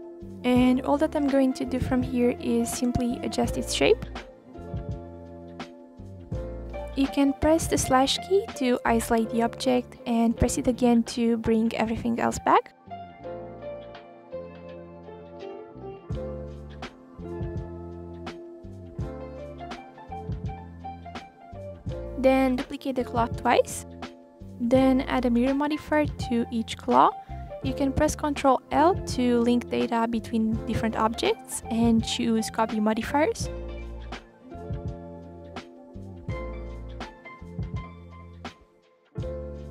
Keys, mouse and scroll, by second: 0.3 middle click, 0.7-1.9 scroll up 17, 1.9 s, 3.3 middle click, 3.8 click, 4.8-5.1 scroll down 1, 5.1-6.5 middle drag, 6.5 click, 7.0 Right, 7.9 KP_7, 8.5-9.5 scroll down 3, 9.5 s, 10.3 click, 10.5 s, 13.0 g, 14.0 s, 14.8-16.2 middle drag, 16.2 Right, 16.3 /, 16.6-17.3 scroll down 7, 17.3 click, 17.8-18.4 middle drag, 18.4 click, 18.6 scroll up 2, 18.7-19.3 middle drag, 19.3 r, 20.1 click, 20.5-21.3 middle drag, 21.3 scroll down 2, 21.4-21.9 scroll up 7, 21.9 middle click, 22.5 shift+d, 22.9 click, 24.0 shift+d, 24.7 click, 25.4 r, 26.5 click, 26.8 drag, 27.4 drag, 27.6 click, 27.9 click, 28.1 scroll down 2, 28.2-28.6 middle drag, 28.6 scroll up 3, 28.8 click, 29.1-30.4 drag, 30.8 middle click, 31.5 click, 32.2 click, 32.6 shift+drag, 32.8 shift+click, 33.3 ctrl+l, 34.5 drag, 35.2-35.9 middle drag, 35.9 s, 37.0 s, 37.9 middle click, 38.2 r, 39.0 click, 39.5 KP_3, 39.6 scroll up 2.